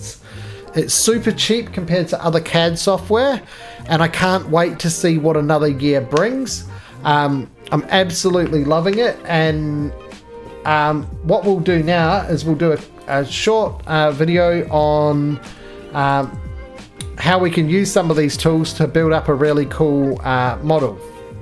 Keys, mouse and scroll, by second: 11.0 middle click, 12.2 4, 13.1 click, 15.4 x, 16.1 click, 16.2 x, 17.3 middle click.